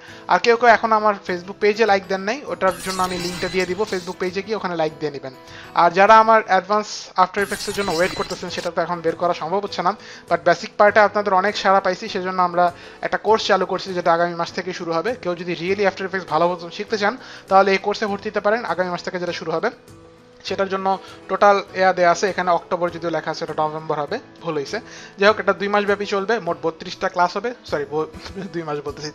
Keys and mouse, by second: 1.2 click, 5.8 click, 14.7 click.